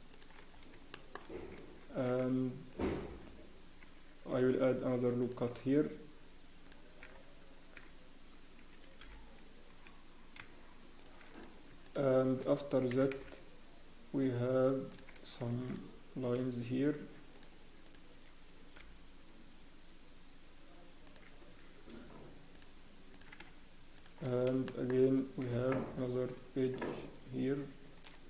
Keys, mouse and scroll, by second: 0.5 scroll up 1, 0.9 shift+middle click, 1.2 scroll up 3, 1.8 ctrl+r, 2.7 click, 3.2 scroll down 1, 4.3 ctrl+r, 7.0 z, 7.5 scroll up 1, 7.7 z, 9.0 scroll up 1, 9.0 g, 11.7 click, 11.8 shift+click, 12.9 e, 15.7 ctrl+r, 17.8 click, 18.8 g, 23.9 shift+click, 24.3 scroll down 1, 24.6 shift+middle click, 25.4 e.